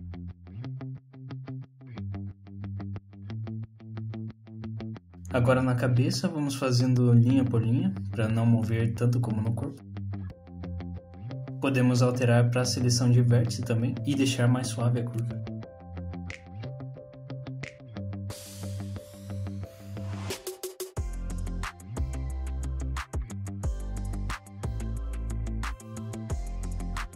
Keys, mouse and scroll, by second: 2.8 middle click, 4.0 scroll down 1, 4.3 middle click, 5.4 click, 6.1 shift+click, 6.9 shift+click, 8.2 click, 10.1 click, 12.3 click, 12.7 1, 13.1 click, 13.8 click, 15.6 click, 16.7 click, 19.5 click, 20.3 click, 21.0-21.7 scroll up 2, 21.7 scroll down 2, 22.1 middle click, 23.4 click, 23.8 middle click, 24.8 click, 26.2 middle click.